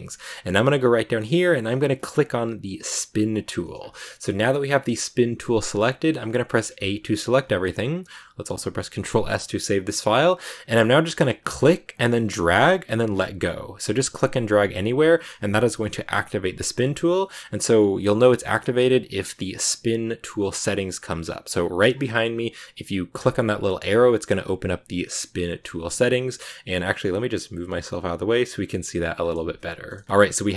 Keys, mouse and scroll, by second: 3.0 click, 3.9-6.6 shift+middle drag, 6.6 a, 8.0 click, 8.9 ctrl+s, 11.5 click, 23.1-26.2 drag, 29.1 click, 29.5-30.5 shift+middle drag.